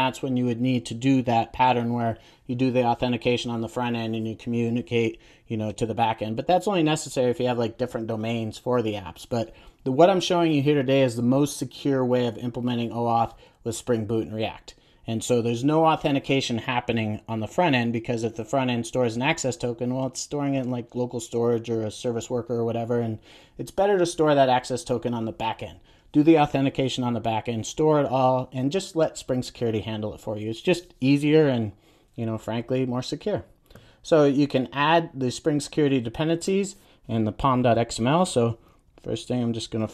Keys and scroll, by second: 38.9 alt+super+l.